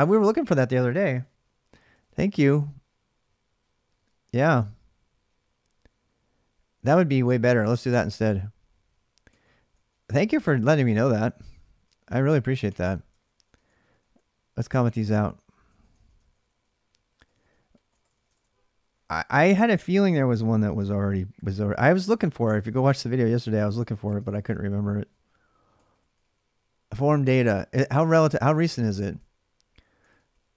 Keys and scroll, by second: 6.5 d, 6.7 d, 7.4 ctrl+[, 7.4 ctrl+j, 7.6 k, 8.8-18.1 typing, 12.9 ctrl+[, 13.0 ctrl+j, 17.9 ctrl+-, 22.1-27.4 typing, 28.7 ctrl+[, 28.7 ctrl+j, 28.9 k, 29.8 k.